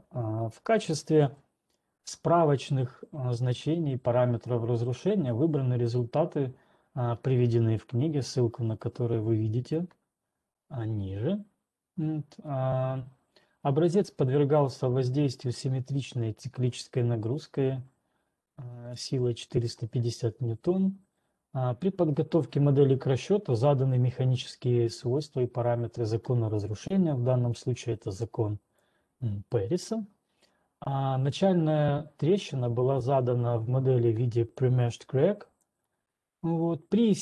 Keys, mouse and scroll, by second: 1.2-1.7 scroll down 10, 1.7 ctrl+2, 9.7 click, 13.5-15.1 drag, 13.5-15.1 scroll, 19.7-24.7 drag, 29.2-34.2 drag, 35.7-37.2 drag.